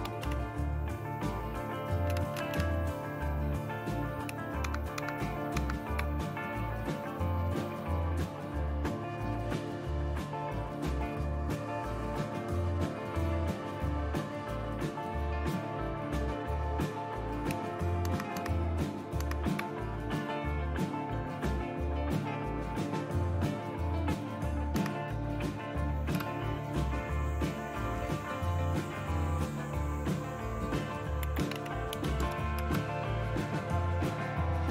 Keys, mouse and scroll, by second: 0.0-0.7 typing, 2.1-2.5 typing, 4.7 super+Left, 5.0 super+Left, 5.6 super+Left, 13.4-18.0 drag, 18.0 super+Right, 18.4 super+Right, 19.2 super+Right, 22.0-24.8 right drag, 24.8 Right, 26.2 Return, 31.0-32.4 typing, 32.6 Return.